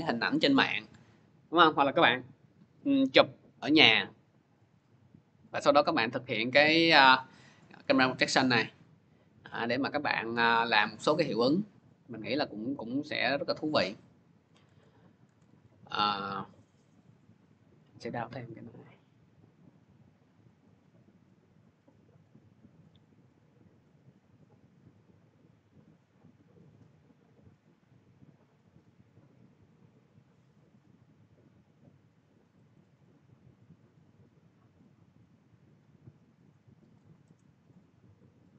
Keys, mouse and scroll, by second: 11.3 click, 14.5 alt+Tab, 15.1 alt+Tab, 17.0 click, 18.7 click, 20.4 click, 20.6 click, 22.7 click, 22.9 click, 24.4 click, 24.5 click, 26.7 click, 26.9 click, 29.4 scroll down 1, 30.1-30.6 scroll down 3, 30.6 scroll up 1, 30.7-31.3 scroll, 32.5 click, 32.7 click, 36.7 click, 37.2 right click, 38.4 click.